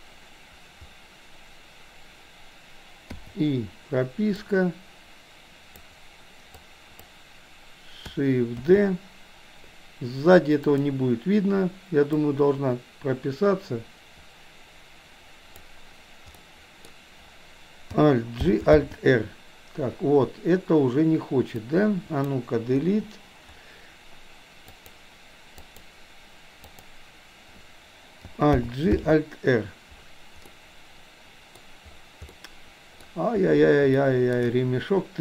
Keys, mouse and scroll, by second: 0.0 click, 4.5-6.1 drag, 6.6 click, 8.7 shift+d, 12.2-15.8 drag, 16.5-17.0 middle drag, 18.5 alt+g, 18.8 alt+r, 21.6-22.3 drag, 22.8 Delete, 24.8 click, 25.6 click, 26.7 click, 28.7 alt+g, 29.1 alt+r, 30.6-31.6 middle drag, 32.5-33.1 middle drag, 34.1-34.5 shift+middle drag.